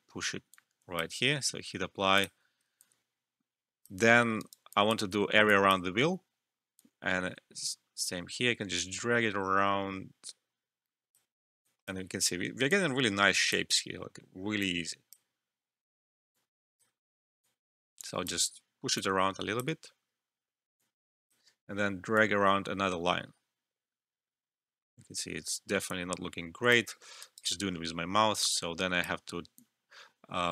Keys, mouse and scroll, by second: 2.7 alt+click, 3.9 alt+middle click, 4.3 alt+right click, 4.6 alt+click, 5.1 alt+middle click, 5.4 alt+click, 5.8 alt+middle click, 6.7-27.5 drag, 27.2 alt+right click, 28.5-30.5 drag.